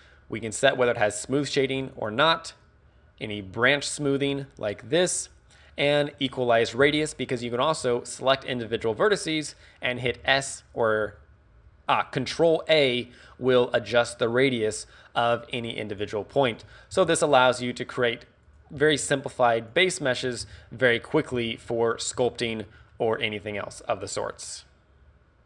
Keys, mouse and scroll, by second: 0.9 click, 2.0 click, 2.8 click, 6.5 click, 6.9 z, 7.8 a, 8.4 right click, 8.8 z, 10.1 s, 10.9 right click, 11.3 shift+s, 11.8 ctrl+a, 11.8 right click, 11.8 z, 16.0 click, 16.4 right click, 16.9 ctrl+a, 18.0 click, 18.5 right click, 18.8 ctrl+a, 19.8 click, 20.0 right click, 20.4 ctrl+a, 21.3 click, 21.3 z, 21.6 scroll down 1, 21.9 middle click, 22.2 Tab, 22.4 middle click, 22.9 middle click.